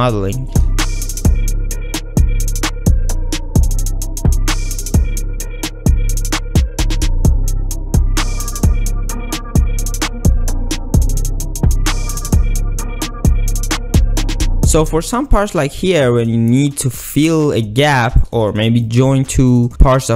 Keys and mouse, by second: 0.6-3.0 typing, 1.3 click, 1.7 ctrl+r, 2.1 click, 2.4 ctrl+r, 3.1 ctrl+middle click, 3.3 ctrl+middle click, 4.6 shift+middle click, 4.8 shift+middle click, 5.2 ctrl+click, 5.3-13.8 typing, 6.4 ctrl+click, 6.5 ctrl+r, 8.4 click, 9.6 shift+click, 10.3 click, 11.5 shift+click, 11.7 ctrl+r, 11.7 shift+click, 12.1 ctrl+r, 12.1 ctrl+z, 13.3 ctrl+r, 13.4 ctrl+click, 13.6 click, 13.7 click, 14.5 ctrl+z, 14.6 ctrl+z, 18.1 click, 19.6 shift+click.